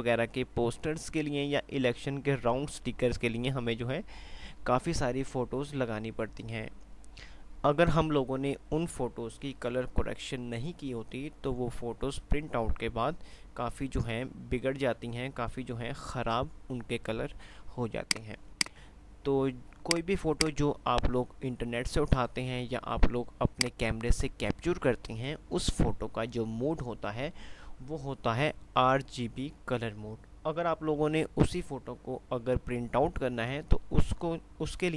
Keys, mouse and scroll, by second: 18.1-22.4 drag.